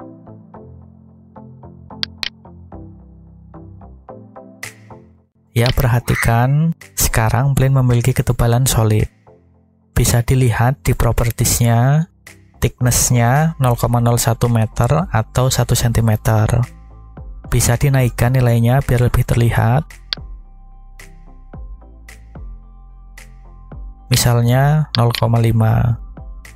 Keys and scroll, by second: 26.2 ..